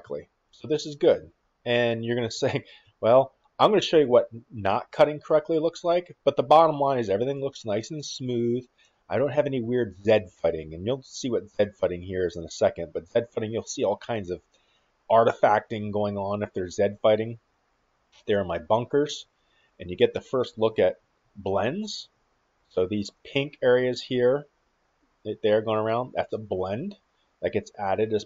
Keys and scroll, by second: 0.4-3.7 typing, 6.5 d, 7.6-9.4 typing, 16.5 d, 17.0 d, 17.6 d, 20.0 shift+w, 22.4 s.